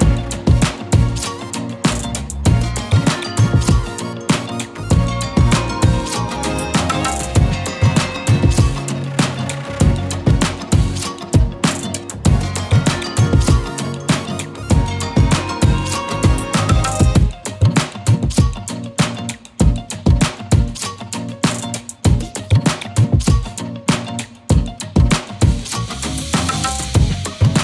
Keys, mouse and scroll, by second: 0.0-0.9 click, 0.4-0.8 z, 1.5 click, 2.1 z, 2.3 click, 2.7 space, 2.8 click, 5.0 alt+shift+click, 6.8 click, 7.6 ctrl+alt+2, 8.6-9.6 click, 18.4-19.9 alt+shift+drag, 21.4 right click, 22.2 click.